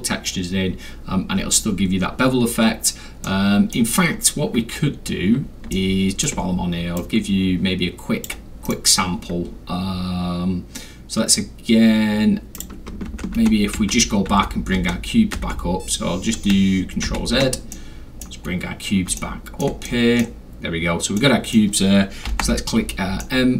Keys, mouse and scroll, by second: 3.2-3.7 middle drag, 3.8 scroll down 2, 4.9 scroll down 2, 5.7 alt+scroll, 5.7-6.2 middle drag, 6.7 scroll down 2, 6.7 scroll, 7.0-8.2 drag, 8.7 right click, 12.6 click, 13.1 ctrl+z, 17.7 middle click, 18.5 scroll up 1, 18.5 middle click, 18.5 scroll, 19.1 alt+scroll, 19.1 middle click, 19.8 middle click, 19.8 alt+scroll, 19.8-20.2 scroll, 21.2-21.5 middle drag, 21.2-21.5 scroll, 22.3 m, 23.2-23.5 middle drag.